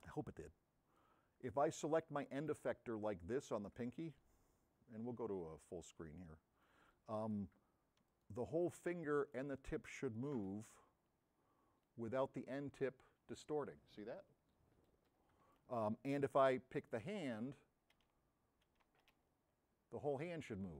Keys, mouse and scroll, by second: 2.3 middle click, 8.1 s, 10.8 v, 16.8 middle click, 17.8 c, 18.4 x, 19.5 v.